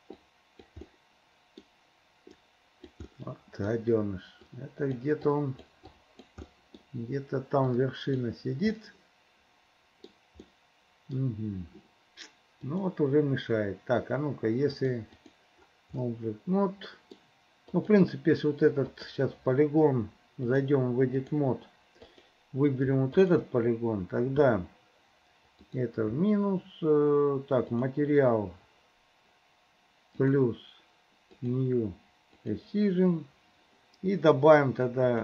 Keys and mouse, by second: 0.2 click, 1.0 middle click, 2.5 right click, 3.2 middle click, 4.5 right click, 5.4 right click, 6.0 right click, 6.5 middle click, 7.8 right click, 8.8 middle click, 9.7 click, 9.7 right click, 10.5 click, 10.5 right click, 12.7-14.0 right drag, 14.8 right click, 16.1-17.2 drag, 16.1 right click, 17.8 click, 19.0 click, 20.5-21.7 drag, 22.2 click, 23.2 shift+click, 25.8 click, 27.8 click, 30.5 click, 31.5 click, 32.5 click.